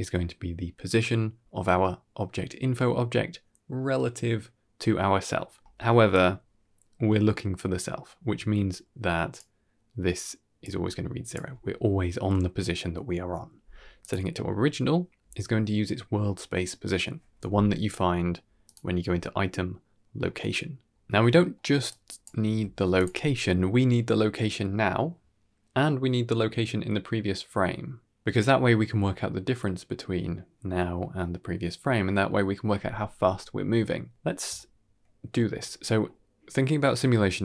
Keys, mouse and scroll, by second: 6.0-9.4 drag, 10.5 click, 13.9 click, 17.4 n, 18.5 click, 21.1 n, 23.4 scroll down 1, 23.6-24.1 middle drag, 24.4 middle click, 24.7-25.0 drag, 25.2 g, 34.4-35.3 middle drag, 35.7 middle click.